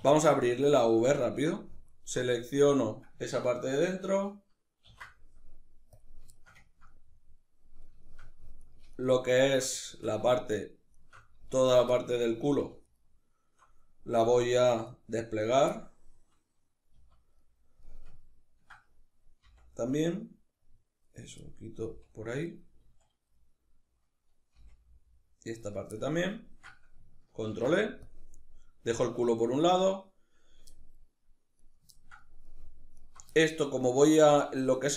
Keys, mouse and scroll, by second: 1.5 alt+right click, 4.5 ctrl+e, 6.0-8.2 ctrl+shift+middle drag, 8.2 alt+right click, 8.6 alt+shift+right click, 9.0 alt+shift+right click, 9.5 shift+middle click, 10.3 alt+shift+right click, 10.6 alt+shift+right click, 11.3 alt+shift+right click, 11.6 shift+middle click, 12.5 alt+shift+right click, 14.1 alt+shift+right click, 14.5 alt+shift+right click, 15.1 alt+shift+right click, 15.4-20.9 middle drag, 16.6 z, 19.1 c, 20.9 right click, 21.1-22.2 middle drag, 21.5 c, 22.2 right click, 22.5 z, 23.0-25.4 middle drag, 24.2 c, 25.4 right click, 25.6-31.3 ctrl+middle drag, 27.1 ctrl+e, 31.3 right click, 31.6-32.6 ctrl+middle drag, 32.6 alt+right click, 33.0-34.9 shift+middle drag.